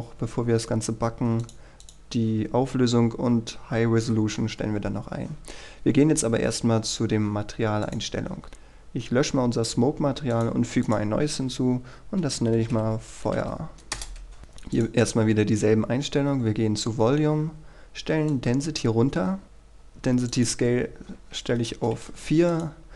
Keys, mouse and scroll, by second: 1.6 click, 6.4-8.0 scroll down 1, 8.0 click, 8.4-9.7 scroll up 1, 9.7 click, 12.4-13.9 typing, 14.9 click, 17.5-18.4 scroll down 1, 18.4 click, 21.3 KP_4, 21.9 Return, 22.7 click.